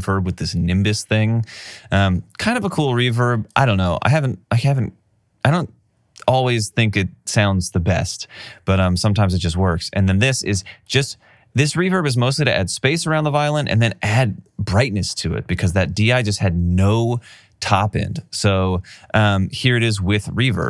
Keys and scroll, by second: 2.5 alt+super+w, 16.2 alt+super+w.